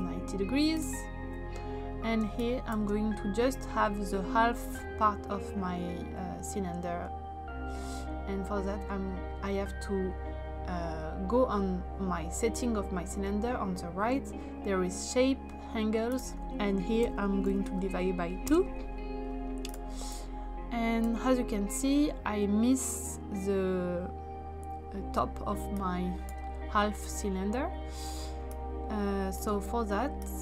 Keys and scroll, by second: 2.2 space, 16.7-18.1 typing, 18.4 Return.